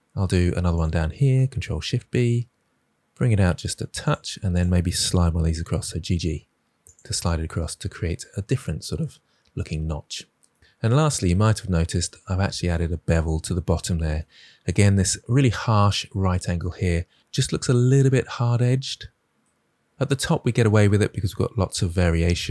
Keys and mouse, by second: 0.6 click, 1.6 ctrl+b, 5.6 g, 5.7 g, 6.8 click, 7.0 Tab.